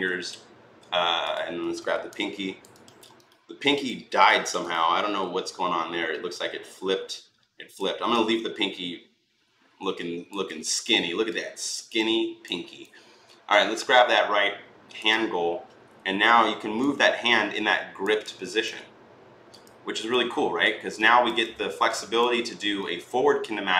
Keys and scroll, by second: 15.9 e.